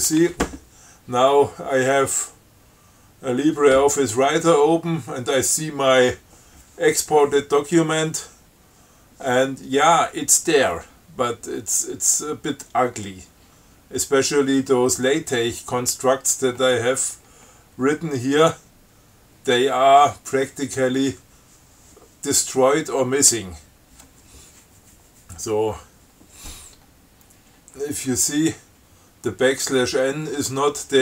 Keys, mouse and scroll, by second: 7.6-8.3 scroll down 4, 8.8 scroll up 2, 11.2 scroll down 2, 12.4 scroll down 2, 13.3-13.6 scroll down 2, 16.6-17.8 scroll down 5, 27.1 scroll down 2, 28.0-28.8 scroll up 4.